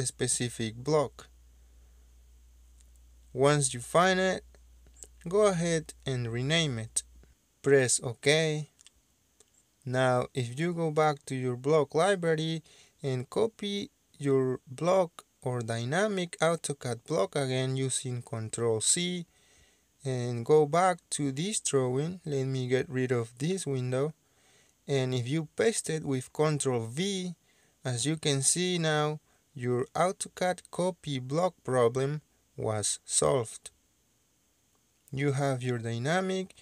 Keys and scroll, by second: 3.1-6.2 typing, 6.1 Escape, 18.5 ctrl+c, 24.4 Delete, 26.5 ctrl+v.